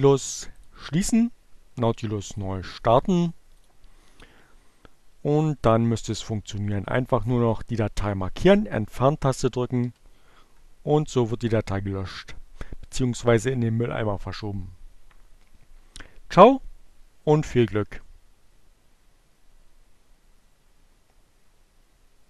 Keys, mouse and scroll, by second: 0.1 click, 5.6 click, 9.1 Delete.